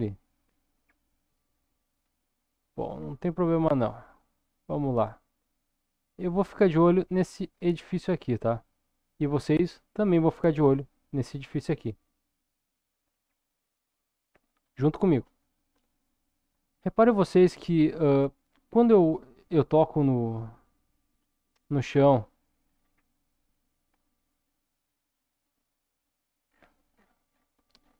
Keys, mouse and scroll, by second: 0.1-1.0 middle drag, 1.5-2.2 scroll up 2, 2.9 scroll down 1, 3.2 middle click, 4.0-4.6 shift+middle drag, 5.3-6.0 middle drag, 6.2-6.9 shift+middle drag, 7.1-7.6 middle drag, 7.7-8.2 shift+middle drag, 8.4 scroll up 1, 8.8 middle click, 9.5-10.2 shift+middle drag, 11.9-12.5 middle drag, 12.7-13.9 shift+middle drag, 16.4 click, 17.3 click, 19.2 click, 22.6-23.5 scroll down 3, 24.9 click, 26.5-27.8 scroll down 6, 27.8-27.9 scroll up 3.